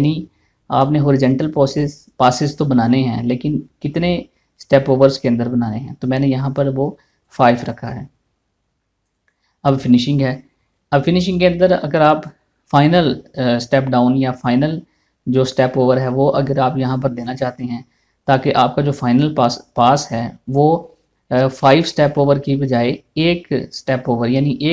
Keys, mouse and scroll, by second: 0.1 middle click, 7.4 click.